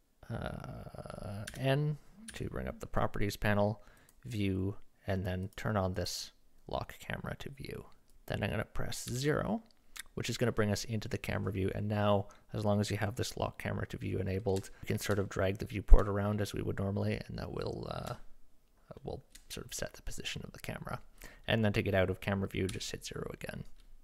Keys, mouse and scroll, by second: 1.5 n, 2.3 n, 4.0 click, 5.4 click, 6.0 click, 9.1 KP_0, 11.8 middle click, 14.7 shift+middle drag, 15.3-15.8 shift+middle drag, 16.0 middle drag, 16.5 middle click, 17.4-18.0 middle drag, 18.1 shift+middle click, 19.0 shift+middle click, 22.7 KP_0.